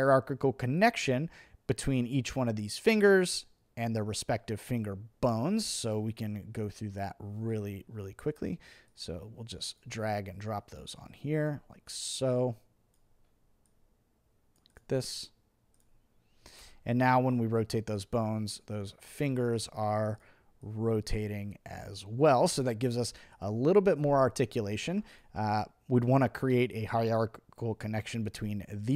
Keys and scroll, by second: 16.6 v.